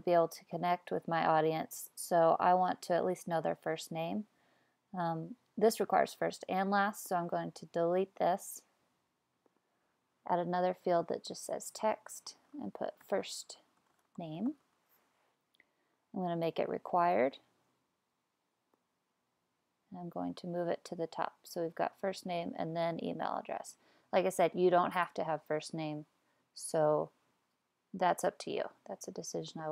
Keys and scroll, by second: 12.3-15.1 typing.